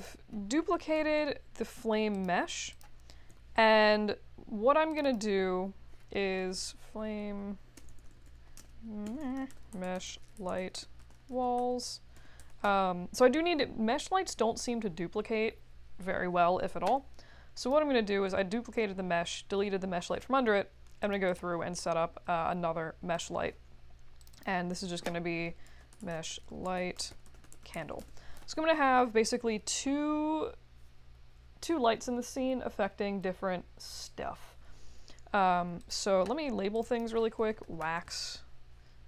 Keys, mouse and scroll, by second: 0.7 shift+-, 1.0 Return, 2.1 click, 2.7 click, 4.9 click, 5.0 click, 6.1-13.0 typing, 17.6 click, 21.0 click, 21.2 click, 23.1 click, 24.2 click, 24.3 click, 25.4-28.3 typing, 35.8 click, 36.7 click, 36.8 click, 37.1-38.3 typing.